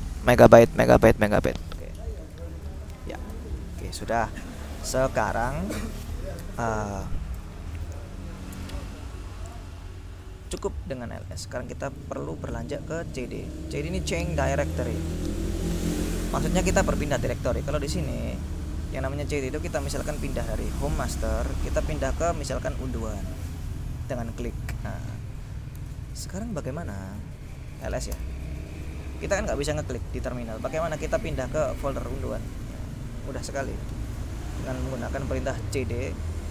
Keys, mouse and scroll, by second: 3.4 ctrl+l, 7.6 alt+Tab, 8.6 alt+Tab, 9.5 click, 11.3 click, 13.0 click, 14.3 click, 18.6 click, 20.9-22.0 drag, 23.0 click, 26.1 alt+Tab, 27.7-28.5 typing, 29.8-31.3 drag, 32.0-33.1 drag, 35.0 click, 35.8 c.